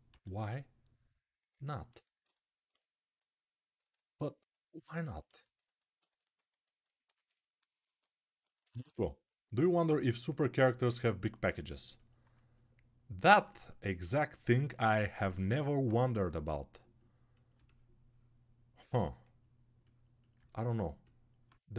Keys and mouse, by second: 0.4-7.8 drag, 7.8-15.1 alt+right drag, 20.8-21.7 drag.